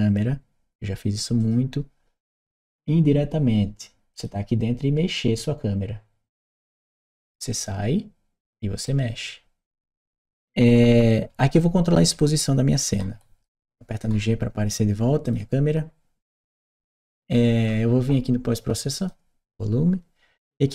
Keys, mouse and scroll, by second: 1.2 click, 2.5 click, 3.9 click, 7.3 click, 8.2 right click, 9.8-13.2 right drag, 15.1 click, 18.8 click.